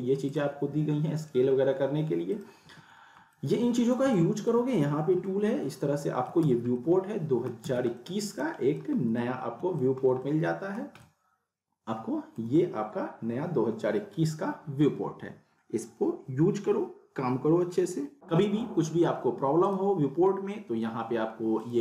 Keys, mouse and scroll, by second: 0.4 click, 2.7 w, 3.4-3.9 alt+middle drag, 6.4 z, 6.7-7.7 alt+middle click, 7.6 z, 7.9-8.9 alt+middle click, 9.0 scroll up 1, 9.2-9.8 alt+middle click, 10.0 scroll down 1, 10.2-10.8 alt+middle drag, 18.3 alt+middle click, 18.3-18.9 middle drag, 19.6 click.